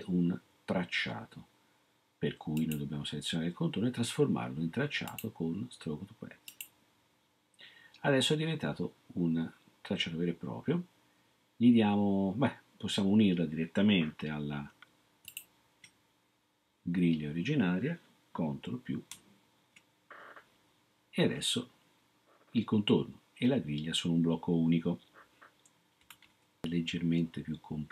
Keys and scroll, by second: 19.1 ctrl++.